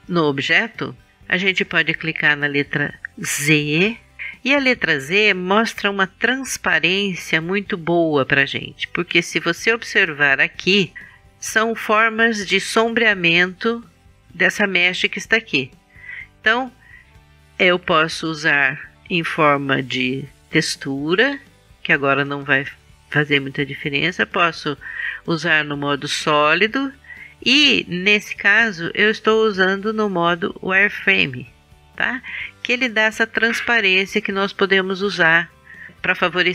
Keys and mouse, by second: 4.2 z, 17.7 click, 25.1 click, 27.5-29.6 drag.